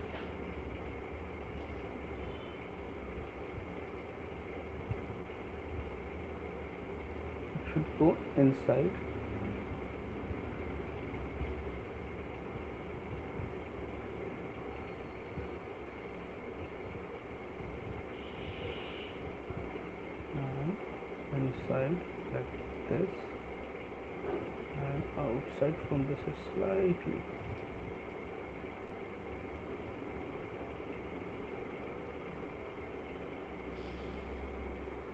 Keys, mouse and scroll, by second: 1.6 click, 3.8 click, 4.8 click, 5.6 click, 7.5 click, 8.7 click, 13.4 click, 17.9 click, 19.1 click, 20.5 click, 22.4 click, 25.1 click, 26.9 click, 28.9 click, 30.2 click, 32.2 click, 33.8 click.